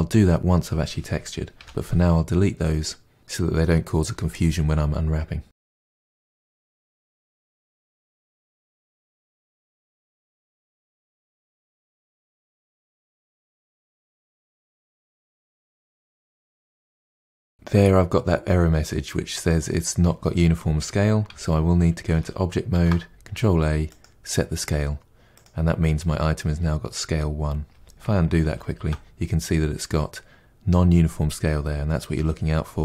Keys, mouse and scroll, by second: 1.6 Delete, 2.6-3.2 middle drag, 5.4 scroll down 3, 5.6 middle click, 6.0 scroll down 1, 6.0-7.6 shift+middle drag, 7.6 click, 8.2 Tab, 8.2 a, 8.5 u, 9.7 Tab, 9.9-10.5 shift+middle drag, 10.5 click, 11.0 KP_Divide, 11.2 middle click, 11.6 2, 11.7 alt+click, 12.0 ctrl+e, 12.1 middle click, 12.4 3, 12.7 ctrl+e, 12.8 middle click, 13.0-13.4 scroll down 2, 13.2 KP_Divide, 13.4 shift+middle click, 13.7 Tab, 13.8-15.4 shift+middle drag, 15.4 click, 15.6 KP_Decimal, 15.9 KP_Divide, 16.0 scroll down 2, 16.1 middle click, 16.2 Tab, 16.4 2, 16.6 click, 16.9 ctrl+e, 17.0 a, 17.2 u, 21.2 Tab, 24.0 ctrl+a, 28.4 ctrl+z.